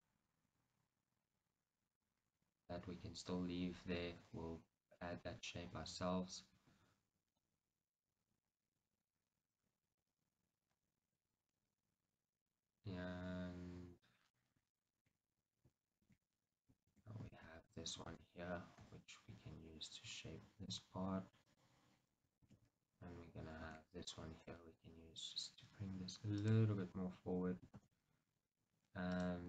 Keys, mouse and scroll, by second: 0.0 click, 0.5 g, 2.1 right click, 14.9-17.7 shift+middle drag, 16.2 shift+z, 17.1 z, 17.7 click, 18.3 middle click, 18.3 shift+z, 18.9 g, 20.8 middle click, 20.9 click, 22.6 shift+z, 23.5 z, 24.6 g, 26.6 click, 29.2 click.